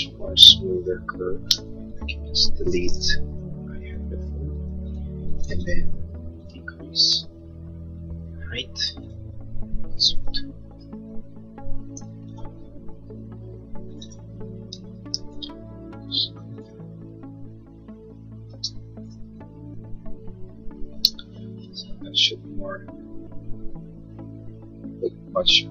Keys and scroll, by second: 1.6 space, 2.0 Escape, 4.4 Delete, 11.2 Return, 12.4 1, 12.7 Return, 18.8 space, 20.0 Delete, 21.4 Escape.